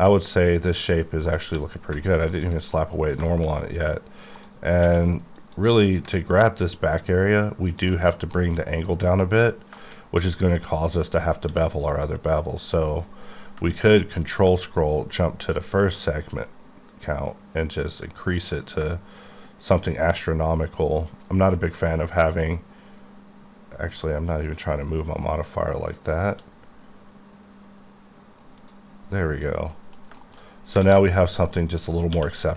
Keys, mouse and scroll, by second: 1.4 click, 1.5 q, 2.4 alt+click, 2.8 middle click, 3.1-3.8 scroll up 4, 3.3 shift+middle click, 4.4 click, 4.9 q, 5.4 click, 6.2-6.8 alt+scroll down 5, 7.7 click, 8.4 middle click, 8.8-11.1 scroll up 11, 9.1 middle click, 9.8 shift+middle click, 11.1-11.5 scroll down 1, 11.5 q, 11.9 click, 14.1 scroll up 1, 16.7 scroll up 2, 17.6 scroll, 17.7-18.2 scroll up 2, 18.2-18.8 scroll up 1, 18.8-20.1 shift+scroll up 1, 22.4 shift+scroll up 2, 23.5 scroll down 2, 24.8-25.6 scroll down 1, 25.6 scroll up 1, 27.1 scroll up 1, 28.3 shift+scroll up 2, 28.7 click, 29.0-29.8 scroll down 6, 29.8 middle click, 30.1 shift+middle click, 30.5-30.8 shift+scroll down 3, 30.8 alt+shift+a, 31.2 middle click, 31.9 click, 32.2 q.